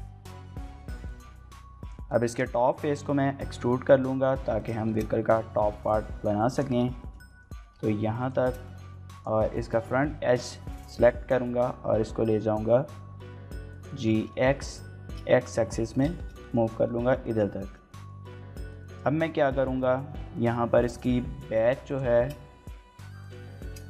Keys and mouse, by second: 1.0 click, 1.8 click, 2.2 shift+middle click, 2.4 middle click, 3.1 e, 4.6 click, 4.8 shift+middle click, 5.1 middle click, 5.5 g, 5.7 z, 6.5 click, 7.0 shift+middle click, 7.3 middle click, 7.5 g, 7.8 z, 8.2 click, 8.4 shift+middle click, 8.6 middle click, 8.8 2, 9.2 click, 9.4 middle click, 9.7 g, 9.9 x, 13.7 click, 14.2 shift+middle click, 14.5 middle click, 15.3 shift+middle click, 15.5 middle click, 16.1 shift+middle click, 16.4 middle click, 17.0 shift+middle click, 17.2 middle click, 17.6 shift+middle click, 17.9 middle click, 18.8 shift+middle click, 19.1 middle click, 19.6 shift+middle click, 20.0 middle click, 20.3 shift+middle click, 20.7 Tab, 21.1 Tab, 21.8 click, 22.2 shift+middle click, 23.1 3, 23.7 shift+middle click.